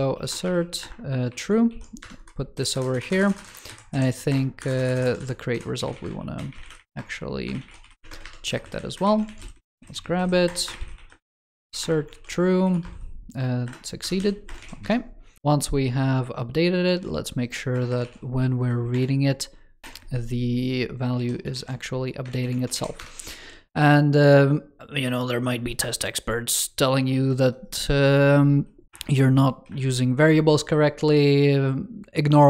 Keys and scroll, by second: 1.1 super+v, 1.5 super+s, 8.8 ctrl+Left, 8.9 ctrl+s, 9.1 super+c, 12.0 super+v, 14.5 super+s, 16.8 super+c, 17.9 super+v, 19.8 alt+BackSpace, 21.0 ctrl+s, 21.4 super+c, 22.1 ctrl+s, 22.5 super+v.